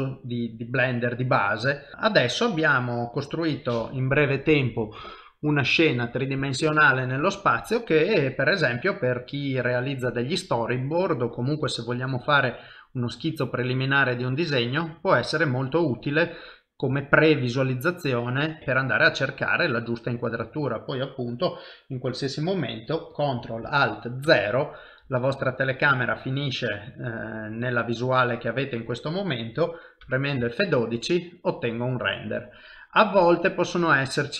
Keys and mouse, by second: 1.9 shift+middle click, 2.2 middle click, 8.2 middle click, 13.7 middle click, 18.6 middle click, 18.7 ctrl+middle click, 19.4 middle click, 24.3 ctrl+alt+KP_0.